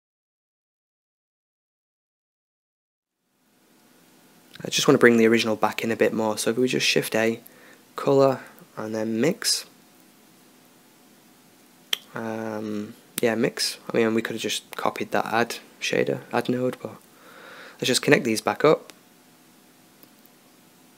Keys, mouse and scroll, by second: 7.0 shift+a, 20.3 right click.